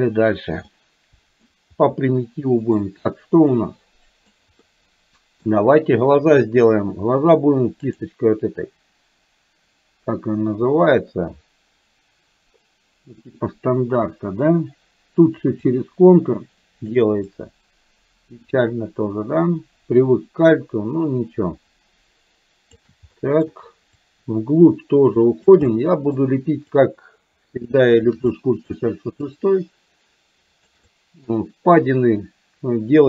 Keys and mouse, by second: 0.7 middle click, 1.9 shift+middle click, 3.7 middle click, 4.7 middle click, 15.7-17.1 ctrl+drag, 17.3-22.9 ctrl+drag, 23.2 middle click, 24.1-25.6 ctrl+drag, 25.7 middle click, 26.8-28.1 ctrl+drag, 28.3 middle click, 29.3-30.7 ctrl+drag, 30.8 middle click, 31.8-33.0 ctrl+drag.